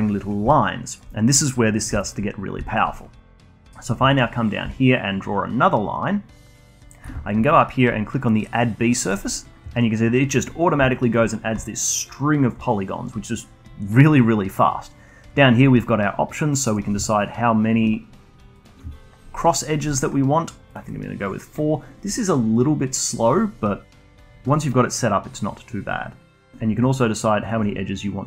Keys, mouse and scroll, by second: 0.4-2.0 alt+drag, 2.0 alt+middle click, 2.3 scroll up 1, 2.6-4.6 alt+drag, 4.6 d, 4.9-6.9 drag, 6.9 d, 9.0 d, 9.1-14.6 drag, 16.7-23.7 drag, 25.2-28.2 drag.